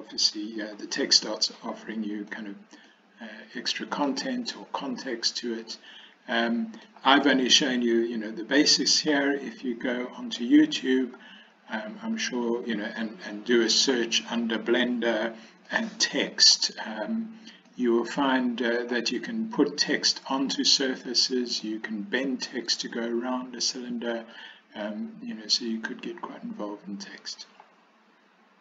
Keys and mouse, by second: 2.9-4.2 middle drag, 4.6-6.9 middle drag, 7.6-9.0 middle drag, 12.3-13.8 middle drag, 15.7 middle click, 17.8-18.9 middle drag, 21.1 middle click, 24.4-27.5 middle drag.